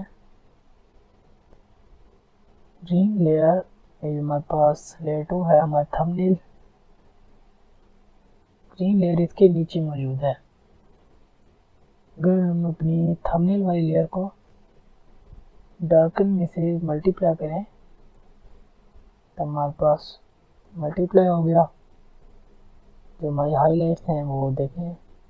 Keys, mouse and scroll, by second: 13.4 click, 17.2 click.